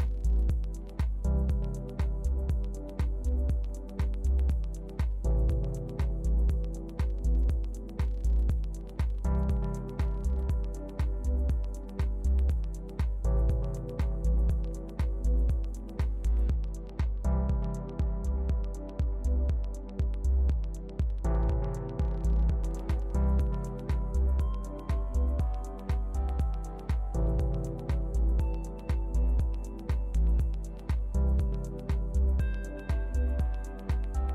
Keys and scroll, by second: 14.5 super+d, 15.3 shift+super+d, 34.0 super+c.